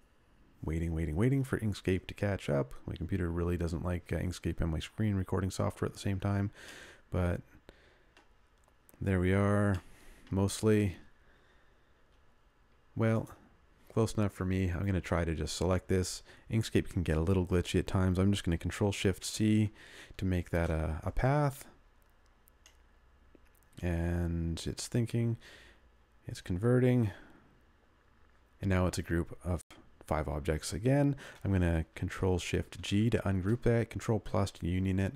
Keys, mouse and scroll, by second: 6.7 middle click, 19.2 ctrl+shift+c.